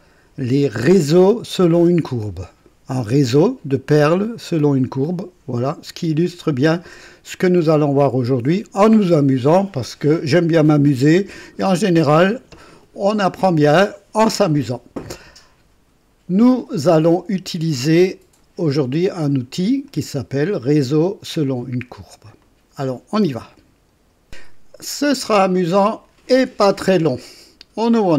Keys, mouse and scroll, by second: 19.8 click, 22.4 click, 24.3 click, 27.9 click.